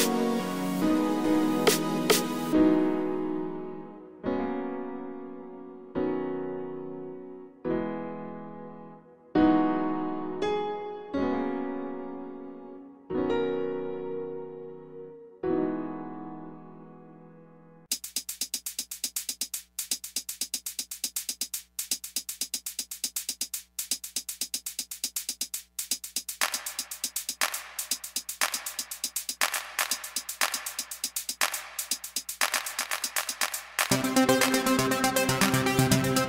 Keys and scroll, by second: 0.0-0.9 typing, 2.2 2, 3.7 alt+z, 6.7 ctrl+z, 10.1 1, 11.2 alt+z, 18.1 ctrl+z, 22.1 g, 22.8 g, 23.7 g, 24.8 g, 25.4 g, 25.9 ctrl+r, 31.2 alt+z, 31.4 alt+z, 31.6 alt+z, 31.7 alt+z.